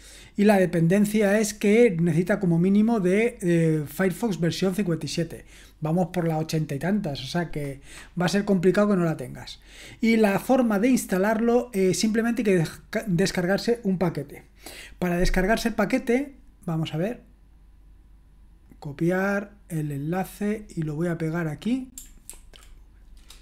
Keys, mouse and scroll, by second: 4.1-7.6 scroll down 1, 7.6-11.4 scroll down 1, 11.4-11.7 scroll up 1, 11.7-18.2 scroll down 1, 18.2-18.7 scroll down 1, 18.7 click, 20.4 click, 21.5 click, 22.3 ctrl+v.